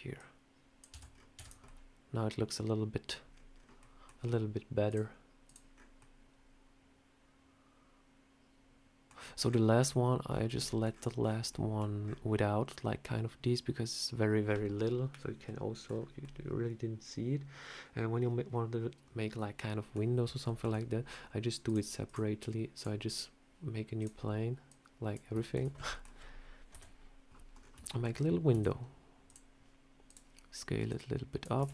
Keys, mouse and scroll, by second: 0.0 click, 0.8 Tab, 1.0 scroll down 4, 1.2 Tab, 1.3 click, 1.5 middle click, 3.6 middle click, 4.7 click, 5.6 scroll up 4, 5.8 middle click, 15.3 middle click, 15.7 scroll down 2, 16.1 middle click, 20.3 shift+middle click, 21.5 click, 21.9 click, 23.8 click, 24.5 click, 25.3 shift+middle click, 25.6 scroll up 5, 25.8 middle click, 26.6 KP_7, 27.4 scroll down 3, 27.7 shift+middle click, 28.4 s, 29.9 click, 30.7 click, 31.5 Tab, 31.6 scroll up 3.